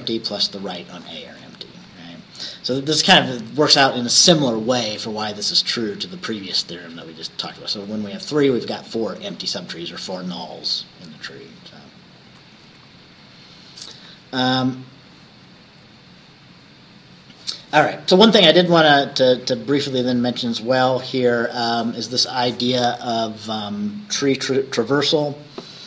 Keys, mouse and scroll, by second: 1.9 Right, 12.3 Right, 14.0 Right, 15.9 Right.